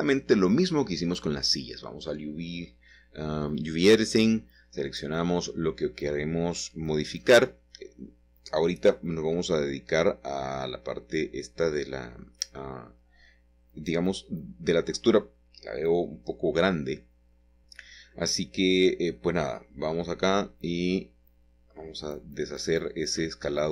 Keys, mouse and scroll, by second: 1.9 Tab, 2.5 Tab, 4.1 a, 6.4 typing, 8.2 i, 10.0 i, 12.7-14.6 scroll up 1, 13.6-15.4 shift+middle drag, 15.8 s, 18.3 click, 19.1-19.9 scroll down 1, 19.9-20.5 scroll down 1, 20.5-21.5 scroll up 1, 22.9 Tab, 23.5 Tab.